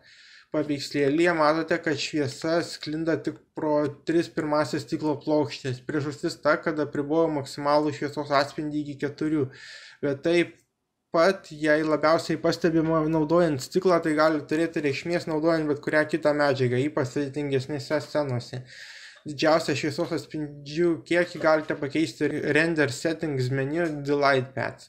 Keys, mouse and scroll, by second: 4.8-6.3 drag.